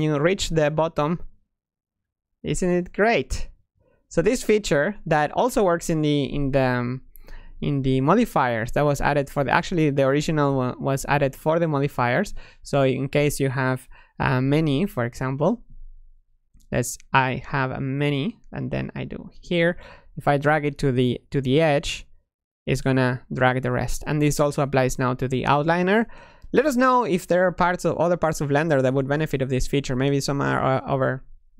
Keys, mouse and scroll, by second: 7.1 Escape, 9.1 click, 10.9 click, 12.3-14.3 drag, 14.3-17.8 typing, 17.8-23.9 drag, 26.1-28.1 drag, 28.1-31.5 middle drag.